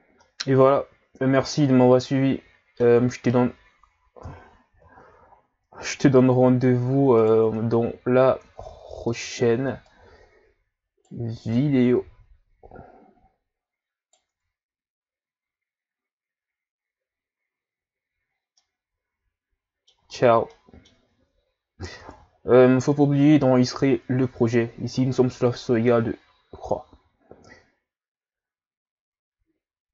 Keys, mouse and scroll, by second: 0.0 scroll down 1, 0.2-1.6 middle drag, 1.6-2.0 scroll down 5, 2.0-4.2 middle drag, 4.2 KP_1, 5.0-5.5 shift+scroll up 4, 6.1-6.5 ctrl+scroll up 4, 6.5 ctrl+scroll down 5, 6.7 scroll up 2, 7.2 right click, 7.4 Tab, 8.4 Tab, 9.9 right click, 11.5 right click, 14.3 Tab, 18.4 scroll down 1, 18.6-20.0 middle drag, 20.0 a, 20.2 scroll down 5, 20.5-22.0 middle drag, 22.0 ctrl+s.